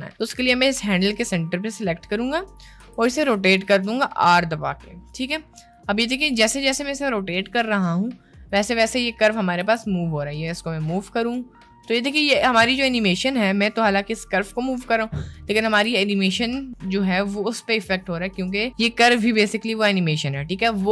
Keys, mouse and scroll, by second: 2.9 r, 6.6 r, 9.7 g, 15.9 g.